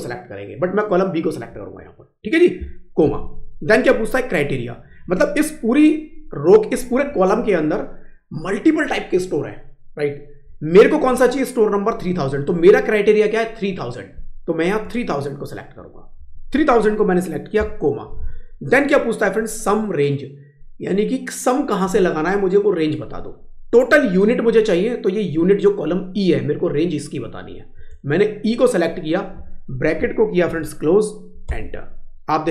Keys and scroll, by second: 32.4 Up.